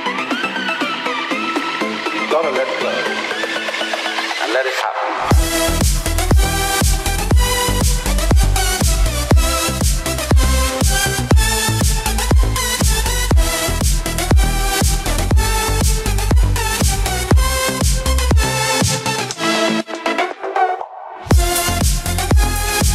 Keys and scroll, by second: 4.6 ctrl+-, 5.3 ctrl+0.